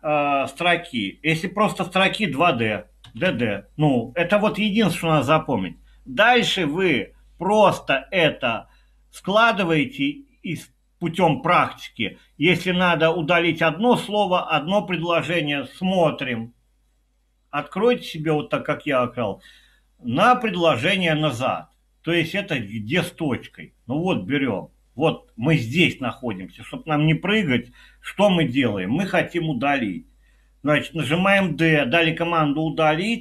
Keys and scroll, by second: 3.1 typing, 31.4 d.